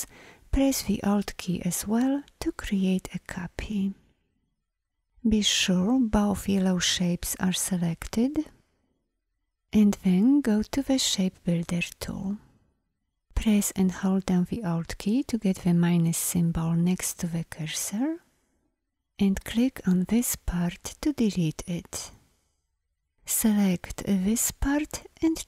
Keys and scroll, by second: 5.6 v, 10.5 shift+m, 23.1 v.